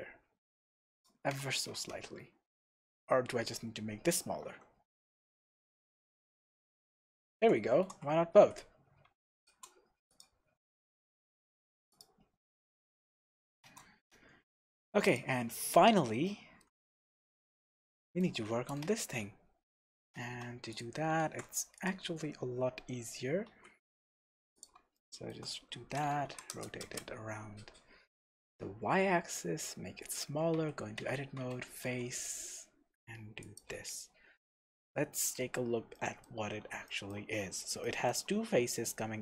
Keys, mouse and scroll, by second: 0.4 scroll down 2, 0.9 click, 1.5 alt+h, 4.4 s, 7.2 click, 7.7 g, 9.4 shift+click, 10.1 click, 10.7 scroll up 1, 11.1-11.4 scroll down 1, 11.9 click, 12.5 scroll up 1, 13.6 shift+z, 14.0 scroll down 1, 14.3-14.7 scroll up 1, 15.1 click, 15.7-20.2 middle drag, 16.2-16.8 shift+scroll up 1, 16.9-17.2 scroll up 1, 20.2 Tab, 20.7 click, 21.2 shift+s, 22.1 Tab, 22.4-22.7 scroll down 2, 22.7-23.5 scroll up 2, 23.5 shift+a, 24.9-30.2 shift+middle drag, 25.9 r, 27.0 KP_Enter, 28.4 s, 30.2 click, 30.5 Tab, 31.4 f, 31.8 e, 33.6 click, 34.2 scroll down 1, 34.4 scroll up 2, 34.6-34.9 scroll down 2, 34.9-39.2 shift+middle drag, 35.4-35.9 scroll up 2, 37.3-37.8 scroll up 2.